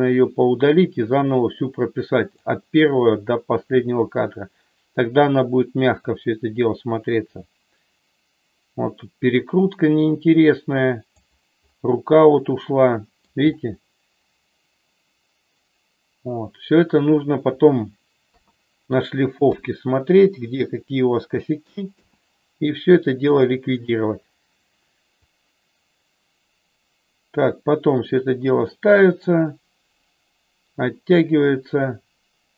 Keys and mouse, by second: 6.0-11.3 drag, 12.1-13.3 middle drag, 18.3 KP_3, 19.5 KP_2, 21.9 KP_0, 25.3-32.5 drag.